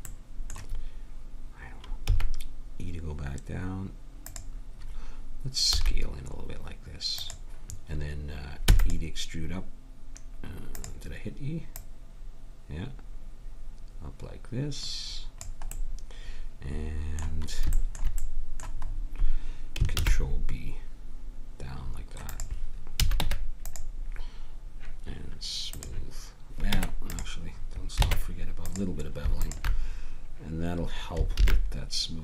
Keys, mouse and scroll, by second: 2.1 e, 5.8 s, 8.7 e, 10.7-12.3 drag, 15.8-16.9 middle drag, 19.9 ctrl+b, 23.0 a, 23.2 Tab, 25.7 click, 26.4 click, 26.8 Tab, 28.0 ctrl+Tab, 29.4 click, 31.4 ctrl+b.